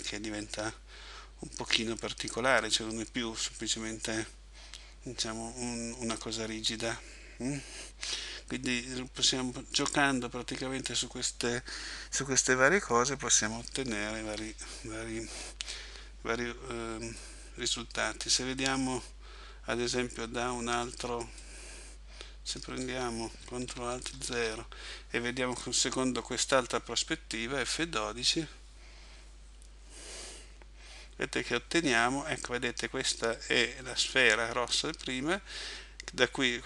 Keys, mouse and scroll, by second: 14.3 Escape, 17.2 middle click, 21.4 middle click, 24.1 ctrl+alt+KP_0.